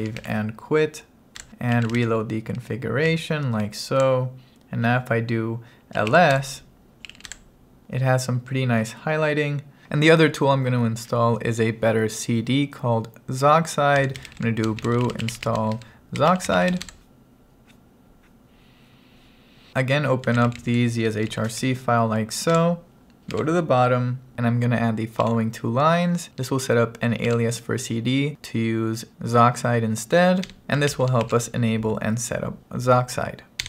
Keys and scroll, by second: 0.0-0.7 typing, 1.4 Return, 1.8 s, 2.1 r, 3.1 Up, 4.1 Return, 6.0-7.7 typing, 6.4 Return, 13.8-17.2 typing, 20.1-21.2 typing, 21.3 Right, 22.6 Return, 25.3 p, 27.4 shift+v, 30.4-31.3 typing, 32.8-33.6 typing.